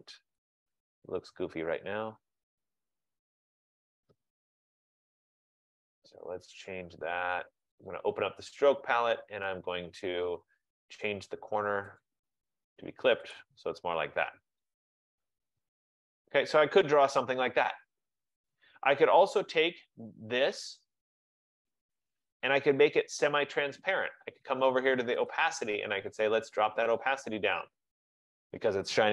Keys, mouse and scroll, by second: 0.7 click, 2.7 click, 3.7 click, 8.0 click, 10.8 F15, 12.1 click, 13.5 click, 15.6 click, 16.4 click, 21.8 click, 25.4 click, 27.1 click.